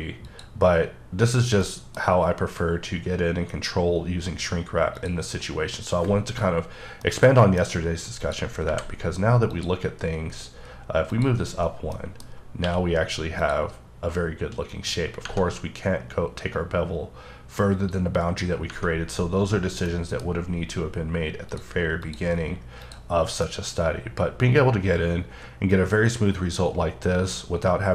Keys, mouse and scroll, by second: 0.3 click, 1.6 middle click, 5.1 click, 7.0 middle click, 8.2 click, 8.6 h, 9.5 click, 11.1 click, 12.0 middle click, 12.3-12.6 scroll up 1, 12.6 q, 13.4 click, 14.7 click, 18.7 Tab, 19.5 scroll down 1, 19.6-19.9 scroll up 1, 19.9 middle click, 21.5 click, 22.0 click, 22.8 click, 23.3 scroll down 1, 23.5-27.9 middle drag.